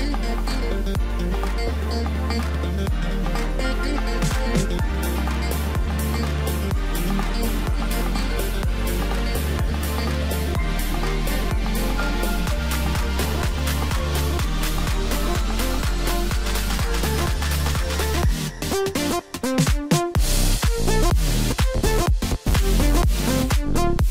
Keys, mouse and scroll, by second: 2.7-4.0 middle drag, 4.0-4.3 scroll up 1, 4.3-5.9 middle drag, 5.9 click, 6.8 KP_1, 7.5-8.1 scroll up 1, 8.1 Tab, 9.0 click, 10.2 shift+d, 11.7 s, 12.9-13.6 scroll up 2, 13.6 s, 19.6-20.9 middle drag, 20.9 s, 23.8 middle click.